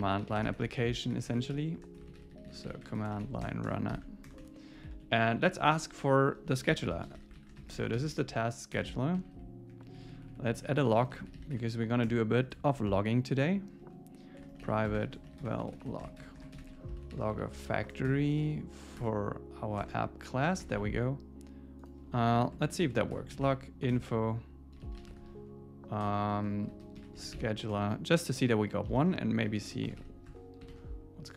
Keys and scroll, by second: 3.4 Return, 3.9 alt+8, 4.2 Return, 4.7 Up, 5.1 Right, 8.8 Return, 9.2 Down, 9.7 Up, 10.6 super+Right, 10.9 Return, 12.8 alt+8, 13.8 Return, 17.9 Return, 19.0 Return, 19.8 Tab, 20.6 super+s, 22.4 Tab, 23.9 Return, 30.3 Tab, 30.7 super+s.